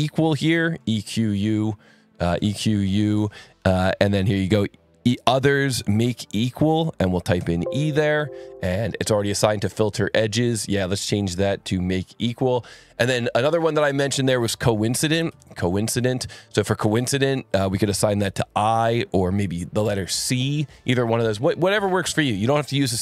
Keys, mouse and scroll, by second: 0.0-2.3 typing, 5.1 click, 5.7 scroll, 6.5 click, 7.3 e, 9.1-11.1 scroll up 2, 11.1 click, 11.8-12.8 scroll up 2, 12.8 click, 14.6-15.8 typing, 17.2 click, 17.8 click.